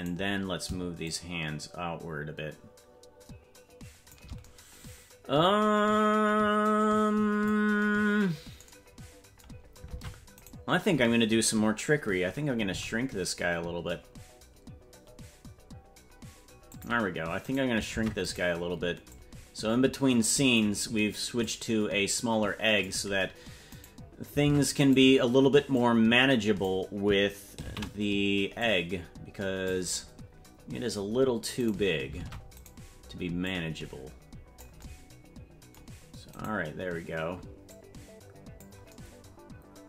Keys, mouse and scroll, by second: 0.1 right click, 1.1-4.2 shift+drag, 6.7 click, 9.9 ctrl+Tab, 10.4-12.7 right drag, 12.7 s, 17.5 right click, 18.0 ctrl+Tab, 18.3 right click, 19.1-20.6 drag, 21.4-22.9 drag, 23.8 right click, 24.5 ctrl+Tab, 24.9 right click, 25.7 click, 28.0 ctrl+z, 28.6-29.7 drag, 31.7 right click, 32.2 ctrl+Tab, 32.7 right click, 33.4-34.7 drag, 36.4 right click, 37.7 click.